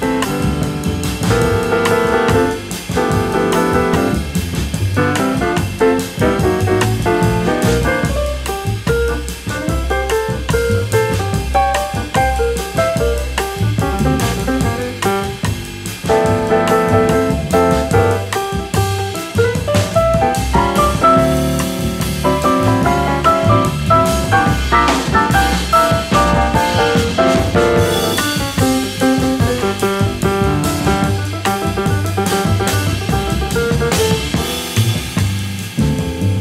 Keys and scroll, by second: 6.3 v, 9.2 super+f, 28.0 v, 30.6 a, 34.4 super+z.